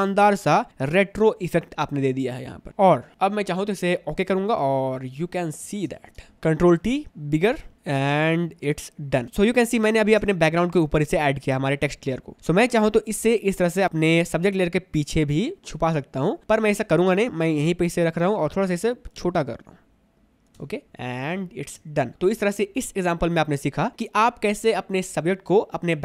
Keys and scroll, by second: 5.8 space, 6.8 ctrl+t, 7.8 space, 10.0 space, 12.4 space, 18.9 ctrl+t, 20.7 Return, 21.5 space.